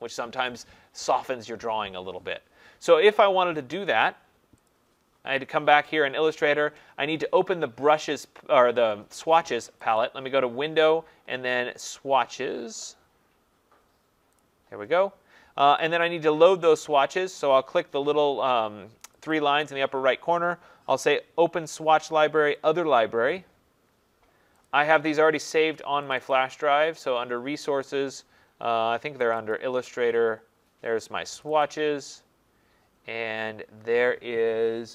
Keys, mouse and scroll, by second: 3.2 click, 4.7 click, 10.0 click, 14.4 click, 16.4 click, 19.3 click, 22.7 click, 24.7 click, 26.1 click, 26.3 click, 29.4 click, 29.7 click, 31.4 click, 31.6 click.